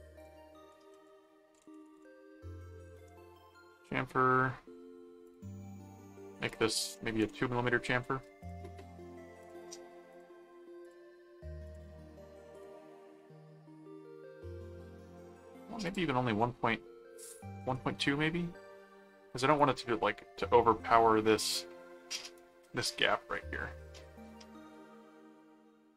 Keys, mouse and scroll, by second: 0.3 click, 0.9-2.5 typing, 2.9 Return, 5.2 click, 6.5 click, 8.4 click, 9.4 click, 10.1 click, 10.8 click, 11.7 click, 12.5 click, 13.2-14.8 middle drag, 15.8 click, 18.5 middle click, 19.5 middle click, 22.8 middle click, 23.9 middle click.